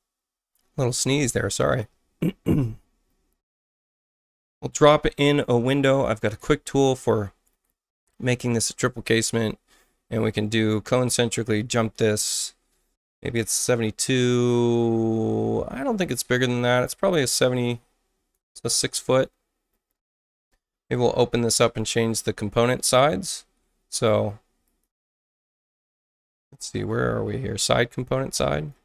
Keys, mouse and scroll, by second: 3.5 click, 6.2 click, 7.4 click, 8.6 space, 9.1 click, 9.8 c, 10.7-18.3 drag, 23.9 click, 24.6 click, 25.6 click, 26.1 click, 28.5 click.